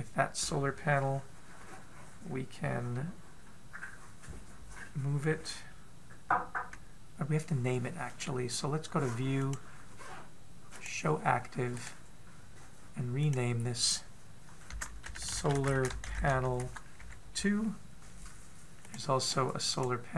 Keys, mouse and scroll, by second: 10.0 click, 12.3 right click.